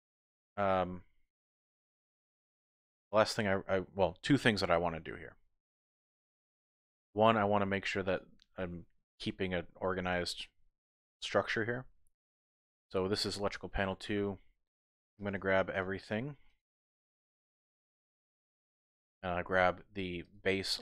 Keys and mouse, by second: 0.0-2.8 drag, 2.8 middle click, 2.8 typing, 10.7 middle click, 12.1-12.8 typing, 12.2 click, 15.2 click, 15.8 shift+click, 16.5 shift+click, 17.1 shift+click.